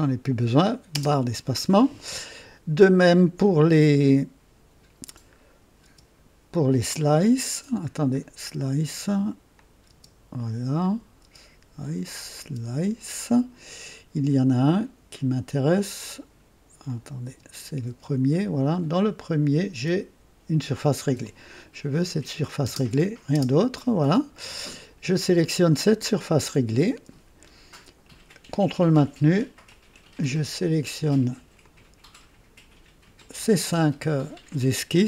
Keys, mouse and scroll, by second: 0.9 space, 3.6 click, 5.8 space, 6.0 space, 9.5 click, 9.9 space, 10.7 click, 11.4 space, 12.0 click, 12.4 space, 16.8 click, 17.2-17.9 typing, 19.1 click, 19.1-19.9 typing, 21.2 click, 21.9 click, 22.6 space, 23.3 space, 26.9-27.3 scroll down 4, 28.7 ctrl+click, 29.6 ctrl+click, 30.6 ctrl+click, 31.6 ctrl+click, 33.1 ctrl+click.